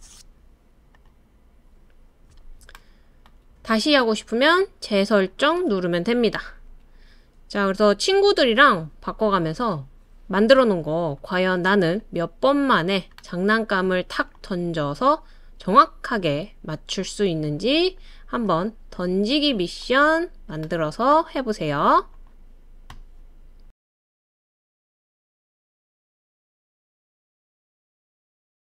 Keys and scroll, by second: 13.9 space.